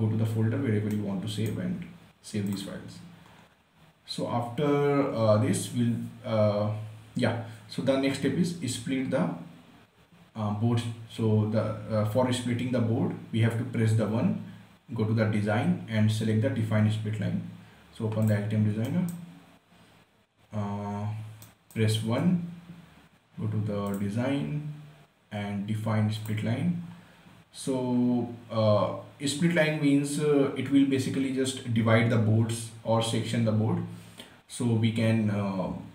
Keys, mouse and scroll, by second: 1.2-2.8 right drag, 2.8 click, 3.6 scroll up 1, 4.7 scroll down 1, 18.6 click, 19.2 right click, 21.8 right click, 22.5 1, 24.2 click, 26.5 click, 27.2 scroll up 1, 27.7 scroll down 1, 28.1 scroll up 1, 30.0 scroll down 1.